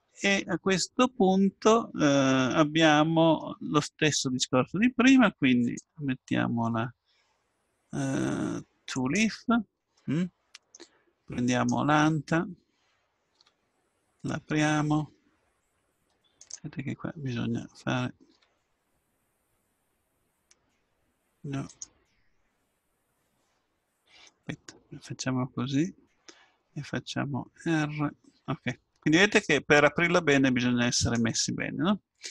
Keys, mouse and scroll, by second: 5.6-9.2 drag, 10.1 middle click, 12.7 right click, 13.3 r, 18.3 r, 24.4-26.0 middle drag, 27.7 r.